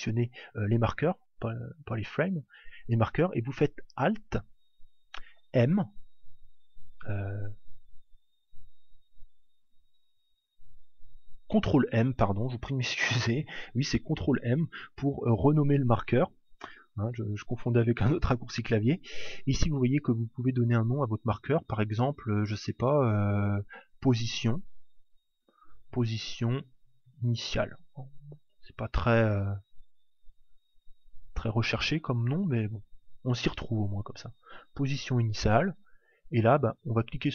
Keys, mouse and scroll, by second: 5.6 alt+m, 8.3 alt+m, 10.9 ctrl+m, 36.9-37.3 right drag.